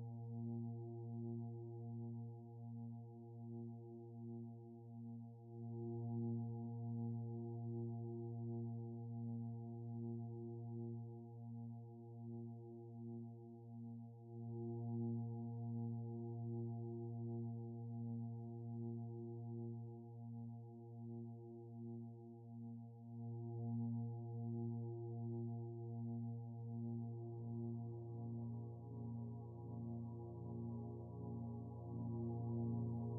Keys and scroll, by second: 11.2 ctrl+z, 28.9 ctrl+z.